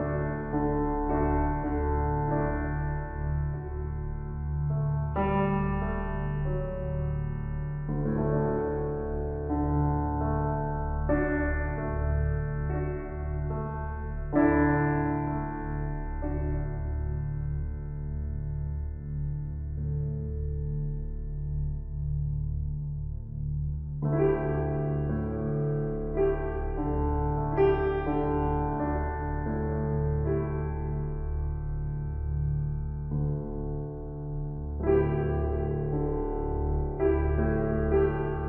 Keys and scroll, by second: 10.7 ctrl+l, 27.3 ctrl+d, 31.0 ctrl+c, 33.2 ctrl+v, 34.8 ctrl+t.